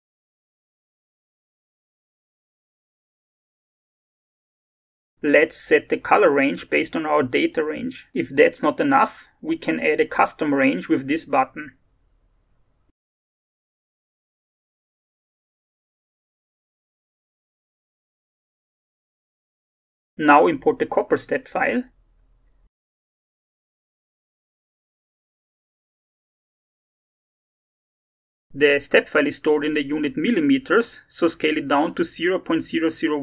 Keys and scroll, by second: 0.0-0.6 typing, 17.5 1, 18.3 Return.